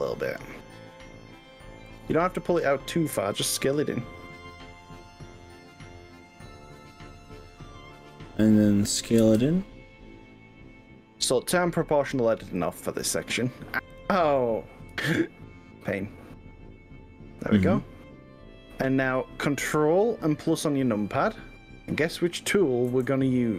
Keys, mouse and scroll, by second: 1.9 click, 2.5-8.4 middle drag, 8.4 click, 9.2 s, 12.7 click, 13.1 ctrl+z, 13.9 click, 14.9 s, 22.9 ctrl+KP_Add.